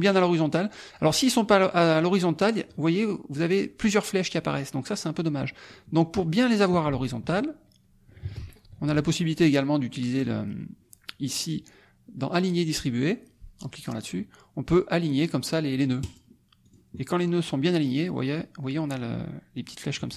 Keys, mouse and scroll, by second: 0.7 click, 1.5 click, 5.7 click, 8.4 ctrl+shift+a, 10.1 click, 13.8 click, 16.0 click, 16.6 click.